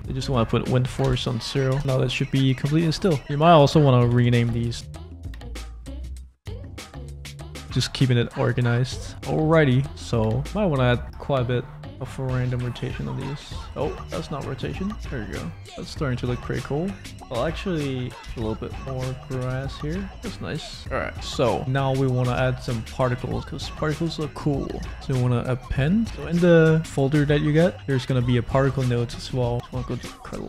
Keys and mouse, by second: 0.0-1.7 drag, 1.8 space, 3.2-4.8 middle drag, 5.1 middle click, 5.4 click, 6.1 s, 6.5 middle click, 7.2 click, 7.2 middle click, 7.2 right click, 7.7 click, 7.7 middle click, 7.7 right click, 8.3 click, 8.3 middle click, 8.3 right click, 9.0 click, 9.0 middle click, 9.0 right click, 9.4 click, 9.4 middle click, 9.4 right click, 10.3 shift+middle click, 12.5 click, 13.6 ctrl+z, 14.7 click, 15.4 click, 15.8 shift+middle click, 16.2 middle click, 18.1-19.5 drag, 18.3 0, 20.3 middle click, 21.6-22.6 drag, 21.6 space, 23.9 space, 24.9-25.9 drag.